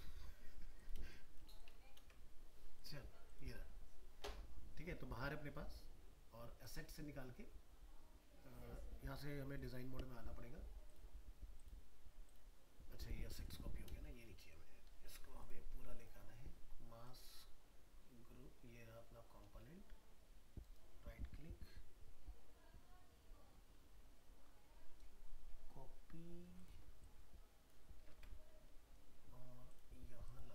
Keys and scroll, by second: 28.0 ctrl+c.